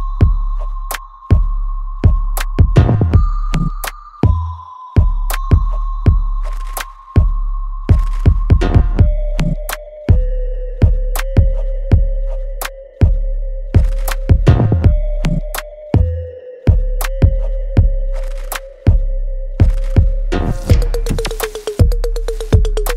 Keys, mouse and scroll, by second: 1.0 right click, 2.0 click, 3.7 alt+right click, 4.2-5.9 alt+drag, 5.9 click, 6.4 right click, 6.4-8.0 alt+right drag, 8.0-14.8 ctrl+drag, 14.8-16.2 alt+right drag, 16.2-19.3 ctrl+drag, 19.3 ctrl+click, 20.5-22.7 ctrl+drag, 22.7 alt+right click.